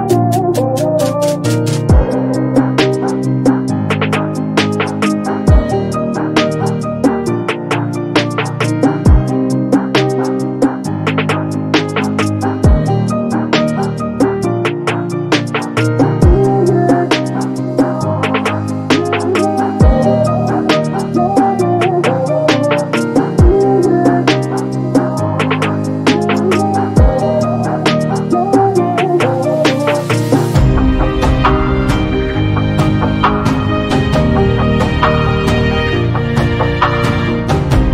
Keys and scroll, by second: 1.1 2, 1.5 Return, 9.9 space, 18.2 b, 29.8 space.